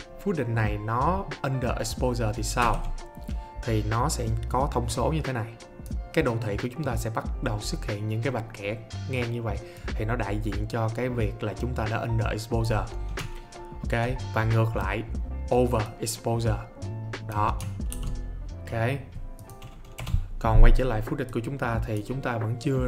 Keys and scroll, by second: 2.6 alt+s, 17.9 ctrl+z, 20.0 BackSpace.